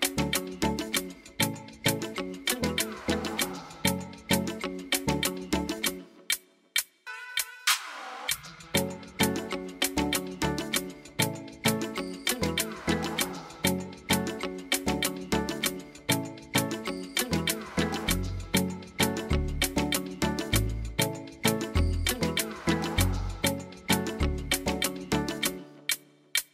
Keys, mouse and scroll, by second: 2.0 click, 2.5 click, 3.7 click, 9.2 click, 11.5 click, 11.9 click, 12.5 click, 13.3 click, 14.7 click, 17.6 click, 18.3 click, 19.0 click, 19.5 middle click, 19.7 middle click, 20.8 click, 21.9 click, 23.5 middle click, 24.9 click, 25.4 click, 25.8 click, 26.3 click.